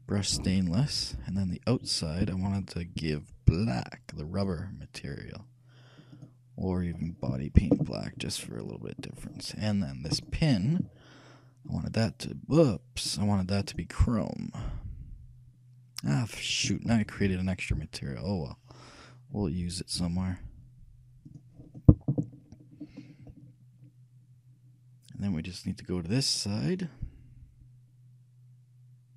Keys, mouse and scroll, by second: 1.6-3.3 right drag, 3.3-5.1 drag, 6.3-8.1 drag, 8.6-10.2 middle drag, 10.3-12.0 right drag, 11.8-15.7 drag, 22.7-25.2 middle drag.